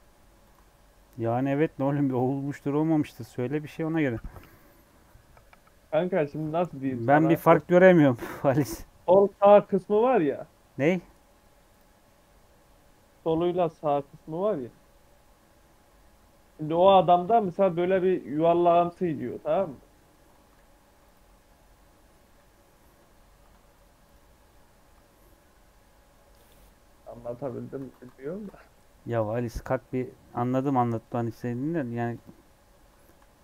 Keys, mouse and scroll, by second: 0.5 Tab, 0.7 scroll down 3, 0.9 middle click, 1.6-2.0 scroll up 1, 2.0 click, 2.3 Tab, 2.5 middle click, 2.9 Tab, 11.7 click, 12.0-15.0 middle drag, 17.2 Tab, 18.2 Tab, 18.7 middle click, 19.0 scroll up 2, 19.2 Tab, 19.6 middle click, 19.9 Tab, 20.5 ctrl+3, 21.0 click, 21.3 ctrl+3, 21.8 ctrl+4, 22.3 ctrl+2, 24.1 right click, 24.5 middle click, 24.9 Tab, 25.4-27.7 middle drag, 27.7 Tab, 28.1 ctrl+2, 29.0 click, 29.3-29.8 scroll down 5, 29.8-30.8 middle drag, 30.8 scroll down 2, 31.0 middle click, 31.6 scroll down 3, 32.1 click, 32.3 scroll up 2, 32.6 scroll down 1, 32.9 shift+middle click, 33.3 click.